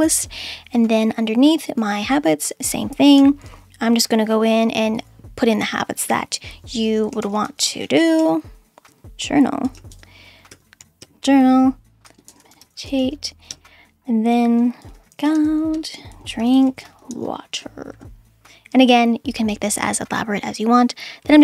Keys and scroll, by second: 3.2 /, 7.0-10.8 typing, 11.0 Return, 12.1-17.9 typing, 18.8 Return.